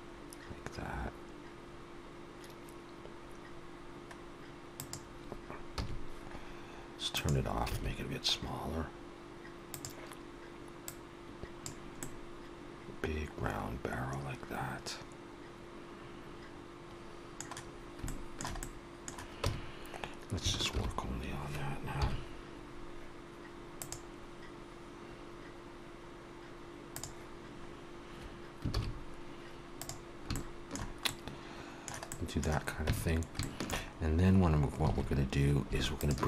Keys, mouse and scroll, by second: 6.0 a, 7.3 click, 7.7 s, 11.1 click, 12.0 middle click, 18.0 shift+middle click, 18.6 middle click, 19.4 Tab, 20.7 shift+h, 21.9 KP_1, 23.8 click, 27.7-28.5 scroll up 1, 28.7 shift+s, 30.3 shift+middle click, 31.0 middle click, 32.0 middle click, 32.8 Tab, 32.8 shift+middle click, 33.3 shift+middle click, 33.7 shift+middle click, 33.9 scroll up 2, 34.8 alt+a, 35.9 alt+shift+click.